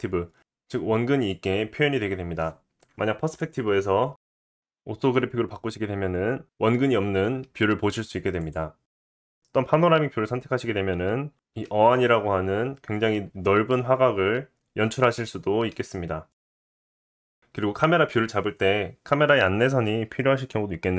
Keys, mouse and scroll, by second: 3.4-17.4 drag, 17.4-20.9 middle drag.